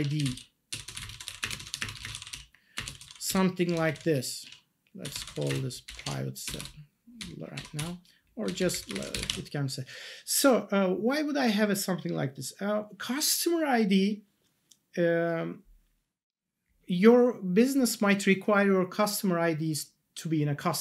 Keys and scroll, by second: 0.0-3.5 typing, 4.4 Left, 4.8-5.9 typing, 6.0 ctrl+s, 6.4 Return, 7.2 Up, 7.7 BackSpace, 9.2 ctrl+s.